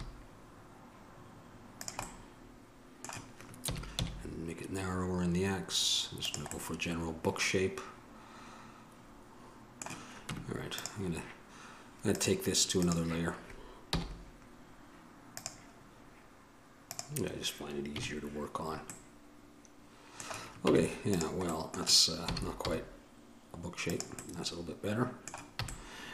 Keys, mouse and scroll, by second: 2.3 middle click, 3.9 s, 7.7 middle click, 10.5 Tab, 13.0-15.5 drag, 14.1 m, 17.1-18.1 drag, 18.1 KP_Decimal, 20.8 Tab, 22.5 s, 25.8 a.